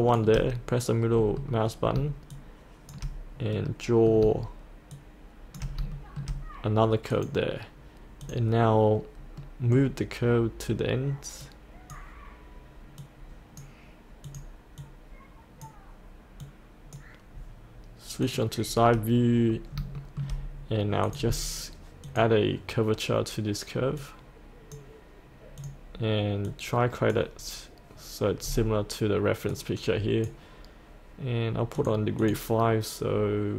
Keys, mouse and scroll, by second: 1.2 middle click, 2.3 shift+click, 3.5 middle click, 4.9 shift+click, 5.9 shift+middle click, 7.1 click, 9.4-10.7 middle drag, 11.4-17.8 drag, 19.5-19.8 scroll down 1, 19.9 shift+middle click, 20.3-21.1 scroll up 1, 21.1-27.9 drag, 28.4-29.5 scroll up 1, 29.5-31.0 drag.